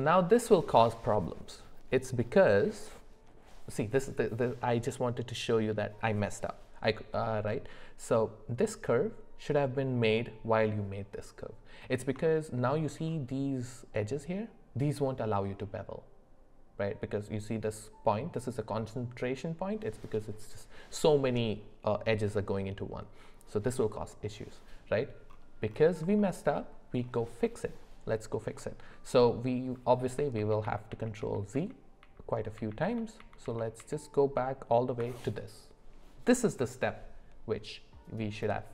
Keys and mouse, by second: 12.2 shift+middle click, 26.2 shift+middle click, 30.4 ctrl+z, 30.6 ctrl+z, 31.5 ctrl+z, 32.0 ctrl+z, 32.6 ctrl+z, 32.8 ctrl+z, 33.8 ctrl+z.